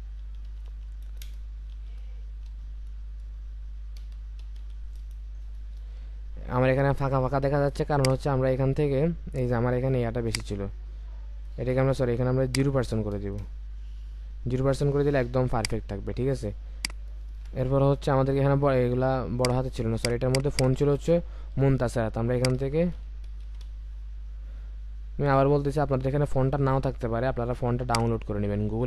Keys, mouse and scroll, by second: 0.2-2.5 typing, 4.0-4.6 typing, 13.1 typing, 13.4 Return, 17.3 ctrl+a, 20.2 double click, 21.1 ctrl+a, 23.4 typing.